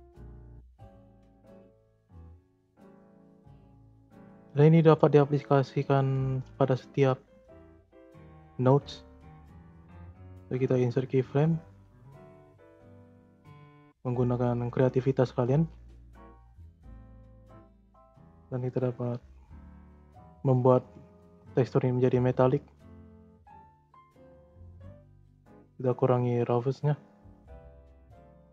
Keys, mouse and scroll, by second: 0.3-1.1 scroll up 4, 1.1-2.0 drag, 2.0 space, 3.4 space, 4.2 scroll down 2, 4.6-5.3 scroll up 5, 5.3-6.3 middle drag, 6.3 scroll down 2, 6.6 middle click, 7.0-7.3 scroll up 5, 7.3 middle click, 7.6-8.3 scroll up 2, 8.3 scroll up 4, 8.6 middle click, 9.2-11.4 right drag, 11.4 scroll down 3, 12.4 scroll up 1, 12.4-13.6 middle drag, 13.6-14.2 scroll up 6, 14.2-15.6 middle drag, 15.6 scroll down 2, 15.9 middle click, 16.3-17.1 scroll up 4, 17.1-18.8 drag, 18.8-20.7 scroll up 1, 20.7 scroll down 2, 20.8-21.5 shift+scroll up 4, 20.9-21.3 shift+middle drag, 21.5 middle click, 22.4-27.3 drag, 27.9-28.5 drag.